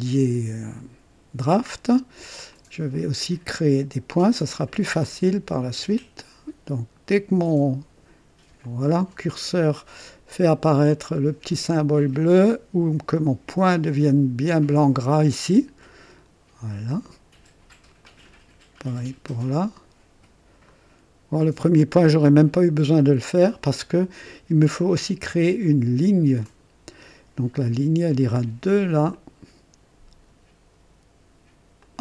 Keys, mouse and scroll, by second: 2.5 click, 8.6 click, 10.9 click, 15.0 click, 18.0 click, 20.6 click, 26.4 click, 29.1 click, 31.8 click.